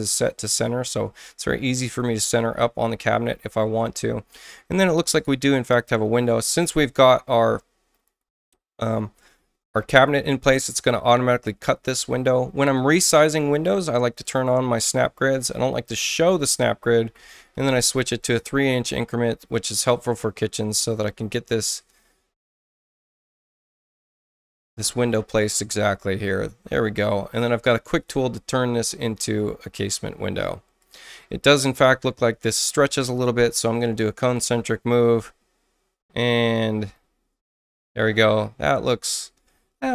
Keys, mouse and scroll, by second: 0.9 ctrl+i, 1.8 ctrl+click, 9.9 ctrl+click, 12.7 ctrl+click, 12.9 ctrl+click, 14.2 ctrl+click, 15.4 ctrl+click, 16.0 ctrl+click, 17.1 ctrl+3, 17.5 ctrl+Return, 18.1 ctrl+click, 19.5-21.4 ctrl+drag, 24.7 ctrl+click, 27.9 ctrl+click, 28.9 ctrl+click, 30.2 ctrl+space, 30.7 ctrl+click, 33.9 ctrl+c, 34.3-36.9 ctrl+drag.